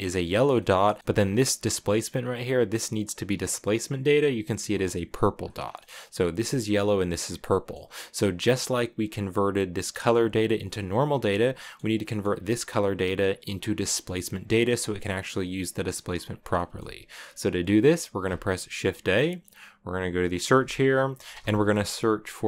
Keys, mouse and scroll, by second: 0.1 scroll down 2, 0.3 middle click, 0.7 scroll up 5, 4.0 click, 5.3 scroll down 4, 5.5-7.6 middle drag, 7.6 scroll up 1, 7.7-9.8 middle drag, 9.8 click, 11.1 scroll up 1, 11.1-11.8 scroll down 4, 11.3 middle click, 11.8 middle click, 12.4 click, 14.1 scroll down 4, 16.3 middle click, 16.9-17.4 scroll up 1, 18.0 shift+a.